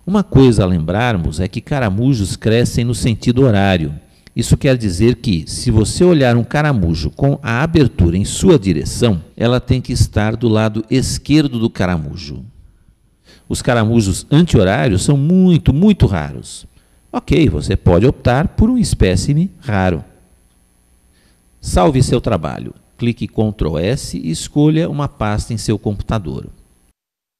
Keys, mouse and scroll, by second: 1.5-5.2 middle drag, 10.8-12.7 middle drag.